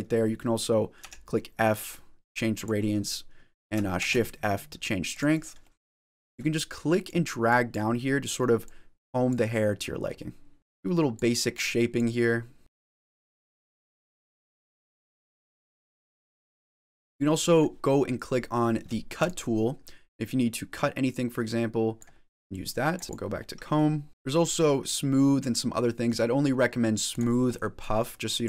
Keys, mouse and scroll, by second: 0.8 f, 3.8 shift+f, 5.5 middle click, 5.5-7.0 scroll up 1, 7.0 click, 7.5 click, 8.0 middle click, 9.2 click, 10.0 middle click, 10.6 click, 11.6 click, 12.2 middle click, 12.8 click, 12.9 middle click, 13.0 shift+middle click, 13.3 click, 13.6 click, 13.8 middle click, 14.0 click, 14.1 middle click, 14.1 scroll down 3, 14.2 middle click, 14.4 ctrl+z, 14.6 middle click, 14.6 click, 14.8 click, 14.8 middle click, 14.8 scroll up 1, 15.0 middle click, 15.2 middle click, 15.2 click, 15.5 click, 15.7 click, 15.9 middle click, 16.1 click, 16.3 ctrl+z, 16.5 middle click, 17.0 scroll down 2, 17.3 middle click, 17.4-18.2 scroll up 1, 19.1 click, 20.4 click, 22.5 click, 23.0 middle click, 23.3 click, 23.3 middle click, 24.1 shift+middle click, 27.0 click, 27.4 scroll down 1, 27.4 middle click, 27.8 click.